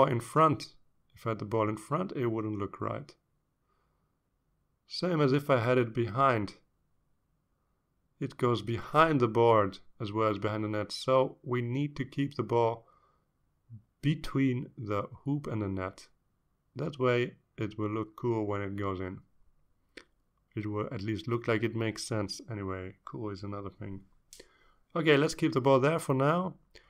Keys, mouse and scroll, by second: 0.4-3.1 drag, 3.9-5.5 drag, 6.7-9.5 drag, 10.4-11.9 drag, 12.4-14.0 drag, 14.9 click, 15.6-18.0 drag, 19.3 click, 20.5 ctrl+scroll down 2, 21.6-22.3 ctrl+scroll down 4, 23.6 scroll down 2, 24.3 scroll up 2, 25.7 click.